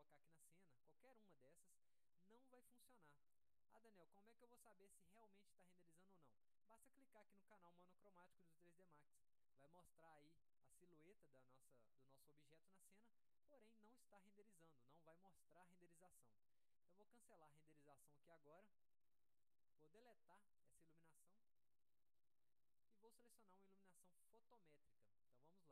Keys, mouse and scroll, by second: 19.5 click, 20.8 click, 23.0 middle click, 23.0-23.4 scroll down 3, 23.7-24.0 scroll up 2, 24.1 alt+middle click, 24.5-24.8 scroll down 1.